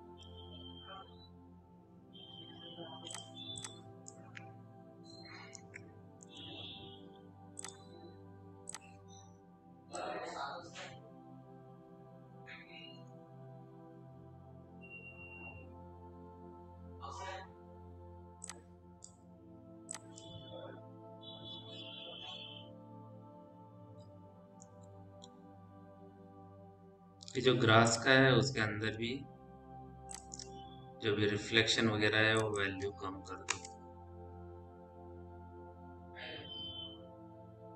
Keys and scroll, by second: 6.7 m, 33.3 Return.